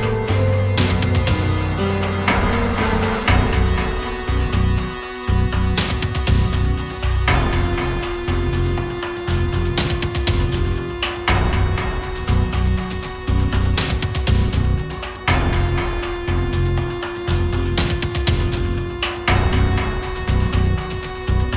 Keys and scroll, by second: 3.2 Down, 14.8 Down.